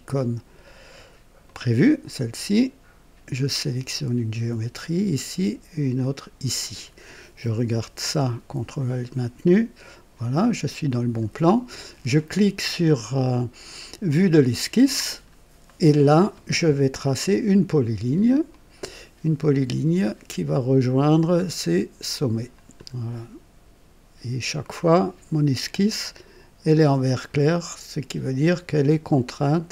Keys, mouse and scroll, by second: 1.4 click, 3.5 click, 6.0 click, 8.0-11.4 ctrl+alt+drag, 14.0 click, 15.2 scroll up 2, 15.6 right click, 18.5 click, 20.4 click, 22.5 click, 25.6 click, 28.2 click.